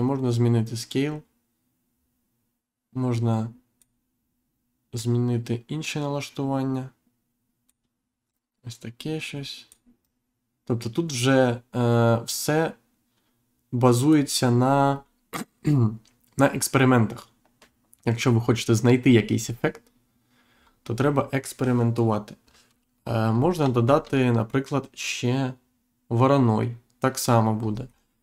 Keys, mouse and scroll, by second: 4.9 click, 8.2 click, 14.6-15.3 scroll down 1, 15.6-16.0 scroll up 1, 18.4-18.8 scroll down 1, 18.9-19.7 scroll up 1, 20.5 scroll down 1, 22.4 scroll down 1, 22.9-23.3 scroll down 1, 23.3-23.7 scroll up 2, 23.8 shift+a, 27.6 scroll up 1.